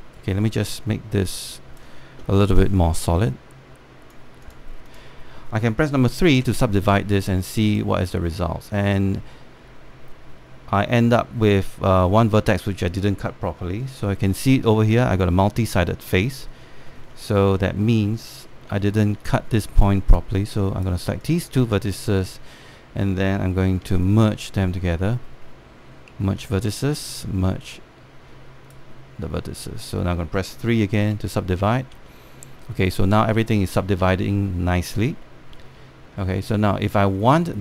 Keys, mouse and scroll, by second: 0.8-3.7 right drag, 3.9 click, 7.0 3, 7.8 click, 10.5 scroll up 1, 16.9 1, 17.8 scroll up 1, 19.8 alt+middle click, 19.9-20.2 scroll up 1, 20.4 alt+middle click, 20.8 right click, 21.9 click, 24.7-30.3 shift+right drag, 30.3-31.7 scroll down 1, 31.7 3, 32.3-32.6 scroll down 1, 32.8 alt+middle click, 34.1 alt+middle click, 34.8-35.7 scroll up 1, 35.9 alt+middle click, 36.6 scroll up 1, 36.9 alt+middle click.